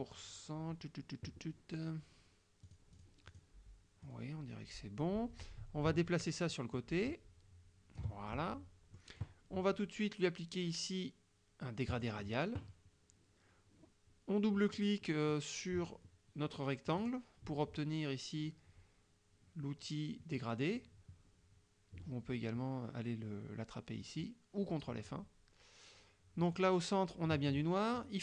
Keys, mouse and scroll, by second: 2.7-3.3 drag, 3.3 click, 4.1-8.2 drag, 8.3 ctrl+click, 12.0 click, 17.0 click, 24.1 click, 26.5 click.